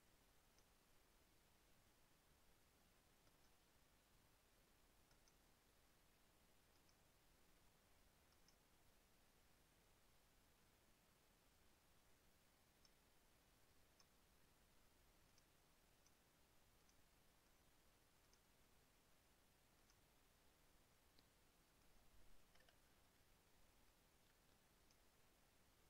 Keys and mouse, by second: 0.7 click, 3.5 click, 5.3 click, 7.0 click, 8.7 click, 12.9 click, 14.2 click, 15.5 click, 16.2 click, 17.0 click, 17.7 click, 18.5 click, 20.0 click, 22.0 click, 22.7 KP_Subtract, 24.1-25.3 drag.